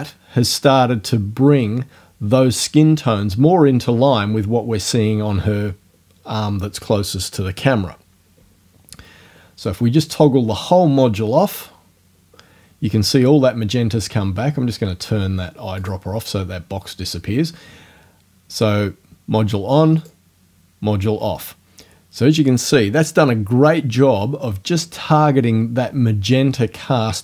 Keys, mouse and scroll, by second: 11.6 click, 15.8 click, 20.0 click.